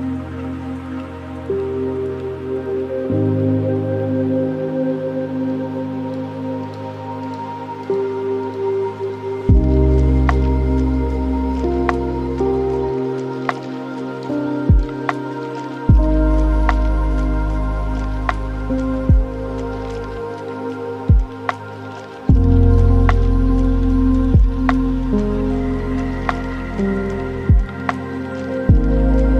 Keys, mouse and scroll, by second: 0.4 click, 2.1 shift+a, 6.6-10.3 ctrl+middle drag, 10.3 shift+a, 13.7-14.4 middle drag, 14.4 shift+a, 19.3-20.5 alt+right drag, 20.5-22.7 middle drag, 22.7-25.6 drag, 25.6-26.1 scroll down 4, 26.1-29.3 middle drag.